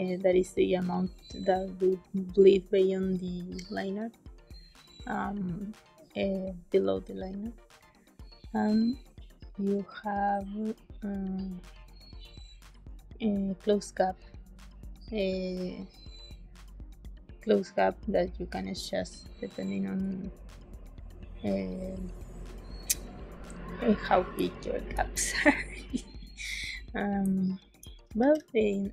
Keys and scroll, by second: 24.3 space, 27.1 space, 28.1 ctrl+s.